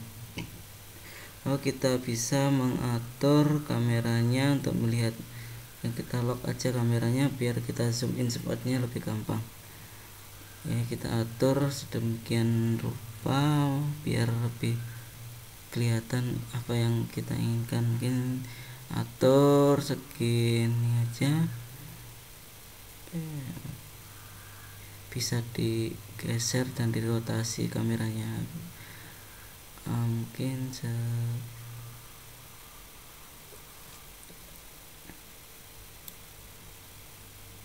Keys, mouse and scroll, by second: 1.6 click, 3.8 click, 5.7 click, 6.9 scroll up 2, 7.2-7.7 scroll down 4, 8.0 middle click, 11.9 scroll up 1, 12.9 middle click, 15.6 g, 22.5 middle click, 23.4 scroll down 1, 24.2 middle click, 27.8 shift+middle click, 29.7 middle click, 32.1 scroll up 1, 34.2 shift+middle click.